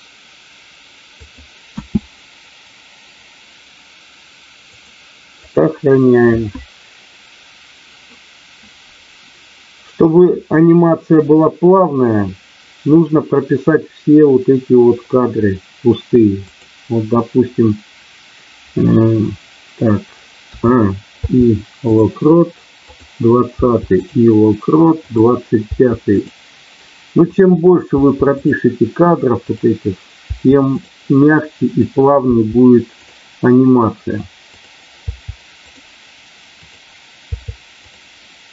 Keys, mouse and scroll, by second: 16.4 click, 21.0 i, 22.8 click, 23.6 i, 25.1 click, 27.3 click, 29.4 click, 30.3 i, 31.7 click, 34.4 click, 35.0 i, 36.5 click, 37.3 i.